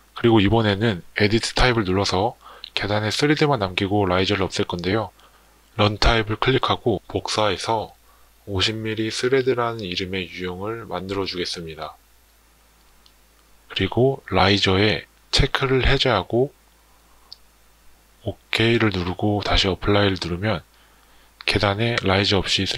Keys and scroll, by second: 10.5 BackSpace.